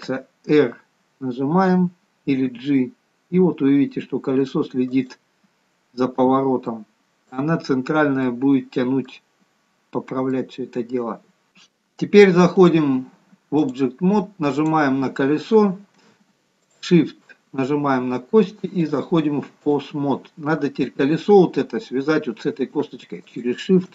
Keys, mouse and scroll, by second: 6.3-8.5 scroll up 2, 6.7 middle click, 8.5 middle click, 10.1-10.5 scroll up 2, 10.5 middle click, 12.7 click, 16.8 shift+click, 19.0 click, 20.7-21.9 scroll up 3, 21.9-22.8 scroll up 1, 23.4 shift+click.